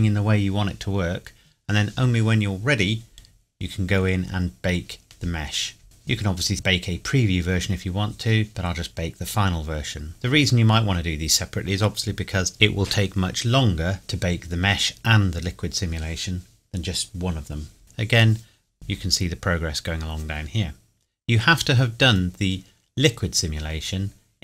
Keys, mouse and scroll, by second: 3.8 scroll down 1, 5.8 click.